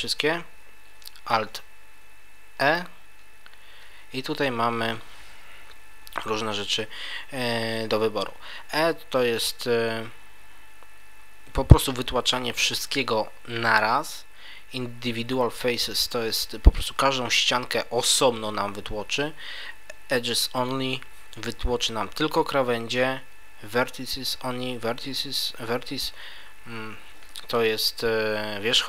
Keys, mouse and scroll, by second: 2.5 alt+e.